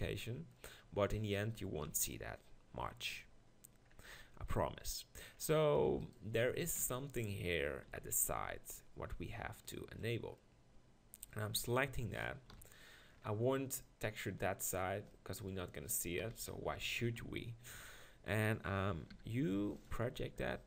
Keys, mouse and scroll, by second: 1.9 KP_1, 4.2 Tab, 6.8 ctrl+KP_Decimal, 7.9 z, 8.4 b, 12.5 KP_1, 16.2 KP_1, 16.5-17.2 KP_4, 17.7 KP_4, 19.1 u.